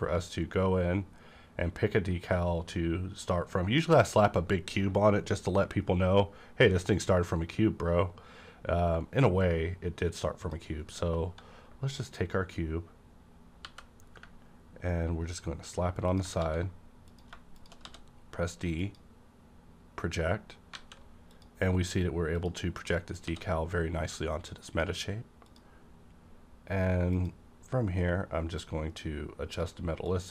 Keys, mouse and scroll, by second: 10.4 click, 13.6 g, 16.1 ctrl+click, 16.4 s, 17.5 click, 17.8 d, 18.8 click, 18.8 d, 20.7 alt+a, 21.3 click, 22.4 click, 22.8-23.2 scroll up 1, 23.2 d, 24.6 click, 25.5-30.3 drag, 28.9-30.1 drag.